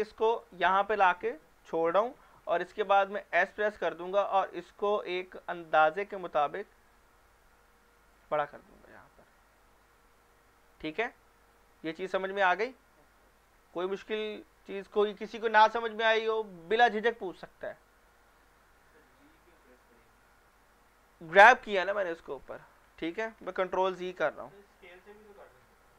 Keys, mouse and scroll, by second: 0.4 click, 3.3 s, 8.1 click, 13.0 shift+middle click, 13.2-13.6 shift+middle drag, 23.6 ctrl+z, 25.7-25.9 middle drag.